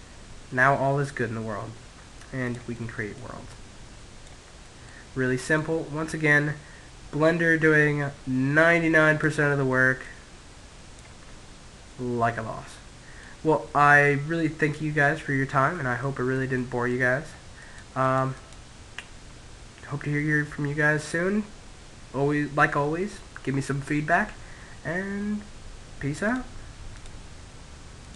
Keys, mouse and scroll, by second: 1.0 middle click, 1.8 click, 3.5 middle click, 3.9 click, 7.8-9.4 middle drag, 8.3 click, 10.5-13.7 middle drag, 14.2-16.6 middle drag, 15.9-18.5 drag, 18.5-23.0 middle drag.